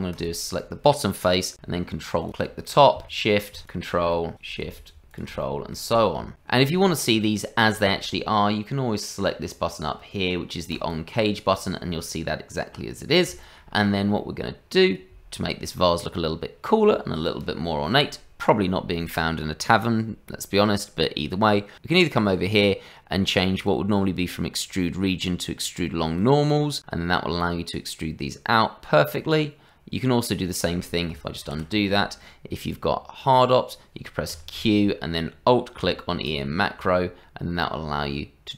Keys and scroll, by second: 31.4 ctrl+z, 34.3 q.